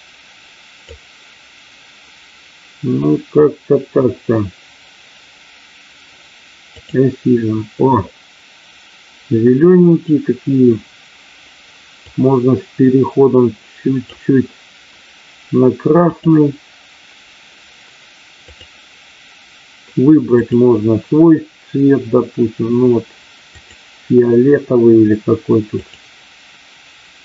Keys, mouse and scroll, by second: 6.6 click, 12.0-14.0 drag, 16.1 click, 25.8 click.